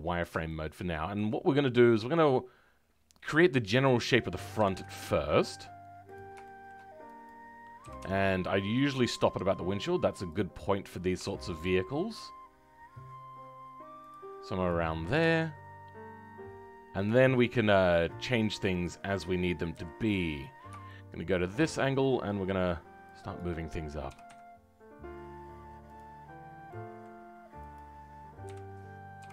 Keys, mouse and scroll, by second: 0.4-4.0 shift+middle drag, 4.0 click, 6.4 shift+middle click, 7.2 click, 21.2 shift+middle click, 21.6-23.3 scroll up 2, 23.3-24.1 scroll up 1, 24.1-26.6 scroll up 1, 26.6 scroll up 1, 27.7-29.3 middle drag.